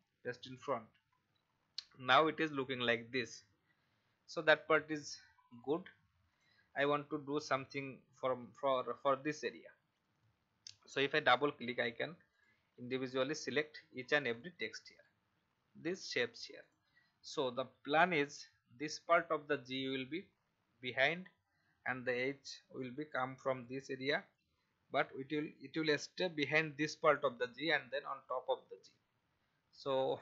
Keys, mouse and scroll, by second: 2.0 alt+scroll up 1, 3.7-5.1 alt+scroll down 1, 5.5 click, 7.1 alt+scroll up 1, 8.7-9.9 alt+scroll down 1, 9.9 click, 15.5-15.8 alt+scroll up 1, 16.6 click, 18.1-21.9 alt+scroll up 1, 30.0 click.